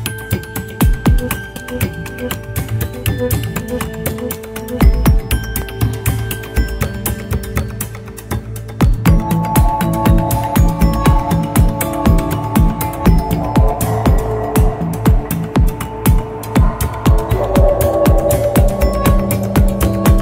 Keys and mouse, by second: 0.4 click, 2.3 click, 4.9 u, 9.6 drag, 10.8 ctrl+s, 11.3-12.4 middle drag, 16.7 click, 17.5 middle click.